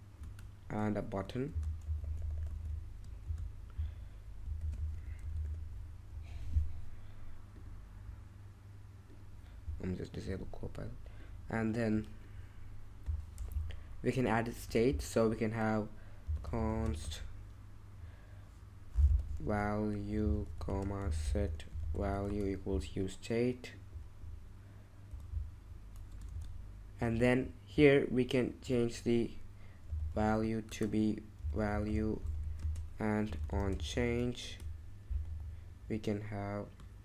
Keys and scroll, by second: 0.2 Return, 1.2-3.2 typing, 4.3-5.9 typing, 6.0 Escape, 13.1-14.6 typing, 16.0-17.5 typing, 18.8-22.3 typing, 25.1-26.3 typing, 29.8-35.2 typing.